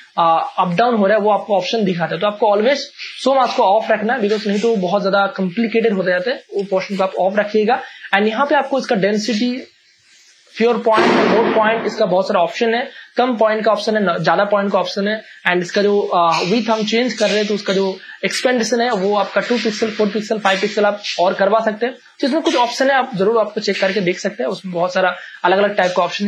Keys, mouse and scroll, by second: 0.3-3.0 drag, 6.6 space, 6.7 click, 7.1 space, 8.5 click, 23.1 click.